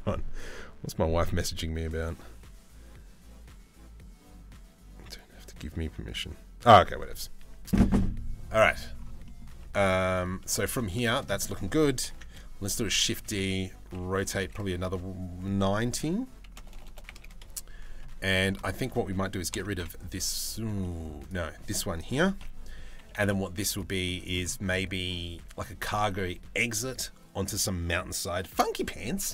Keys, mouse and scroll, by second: 8.2 middle click, 8.8 middle click, 9.1 Tab, 9.7 click, 10.0 click, 10.7 shift+click, 10.9 middle click, 11.6 ctrl+l, 12.4 shift+d, 13.6 r, 17.9 middle click, 18.2 click, 20.4 middle click, 20.8 click, 21.7 ctrl+l, 22.8 Delete, 23.6 middle click, 24.7 middle click.